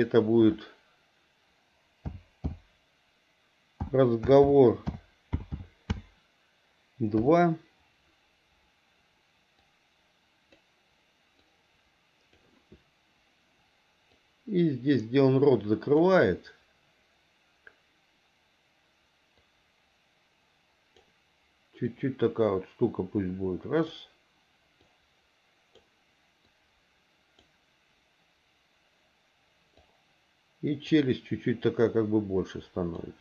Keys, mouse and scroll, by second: 11.5 click, 14.2-16.1 drag, 19.4-21.0 drag, 21.9-23.9 drag, 24.8-25.8 drag, 26.5 click, 29.8-30.9 drag, 31.7-33.0 drag.